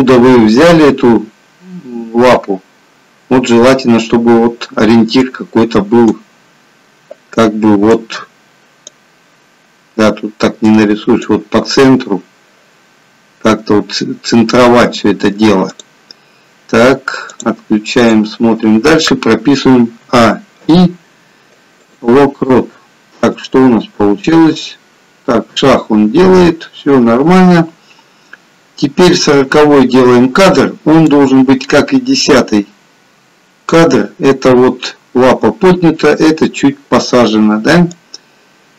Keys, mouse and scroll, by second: 19.9 a, 20.5 a, 23.6 click, 31.3 click, 38.1 click.